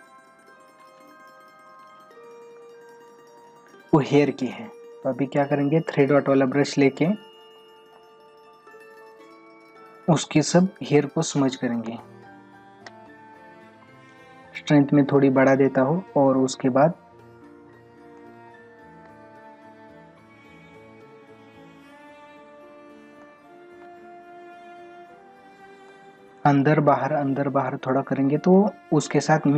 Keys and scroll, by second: 9.7 ctrl+-, 11.9 space, 16.3 ctrl+-, 17.6 ctrl+-, 18.2 space, 23.2 space, 25.9 space.